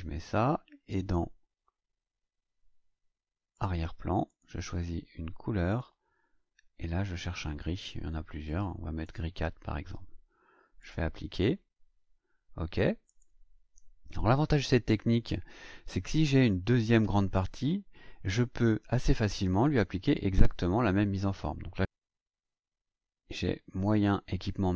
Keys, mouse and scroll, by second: 3.5 click, 4.2 click, 5.6 click, 7.2-8.6 drag, 9.0 click, 10.8 click, 13.0 click, 22.4-23.2 scroll down 2, 23.9 click.